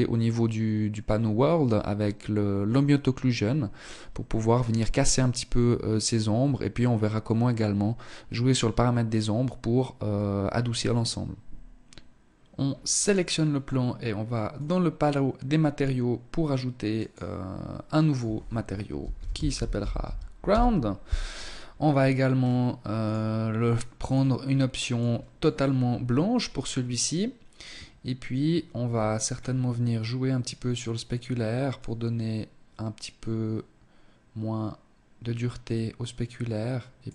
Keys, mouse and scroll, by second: 11.9 right click, 13.5 click, 15.9 click, 17.1 click, 20.7-22.0 scroll down 4, 22.0 click, 22.0-22.7 scroll down 1, 23.1 click, 25.5-26.1 scroll down 3, 27.8-29.0 scroll up 5, 29.0 scroll up 1, 30.7 click, 36.7 click.